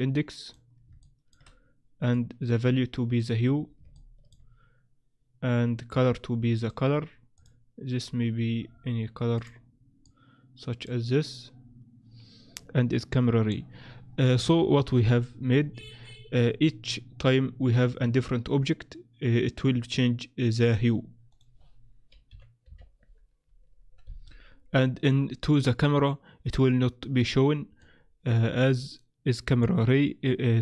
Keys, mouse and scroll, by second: 1.0 shift+middle click, 2.1 click, 3.9 shift+middle click, 5.9 click, 7.3 click, 8.7-9.3 scroll down 3, 9.3 click, 9.3-10.4 scroll down 2, 12.6 click, 21.3 click, 27.8 click.